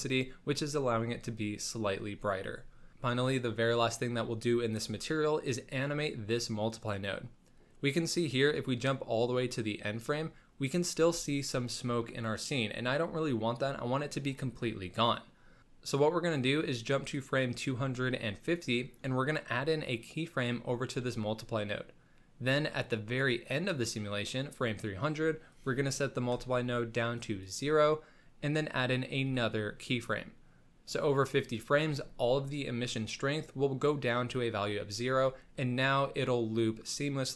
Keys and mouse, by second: 5.7-7.1 drag, 9.2 click, 17.6 click, 18.4 middle click, 21.1 middle click, 23.1 click, 24.3-24.7 middle drag, 25.5-27.5 drag, 29.2 i.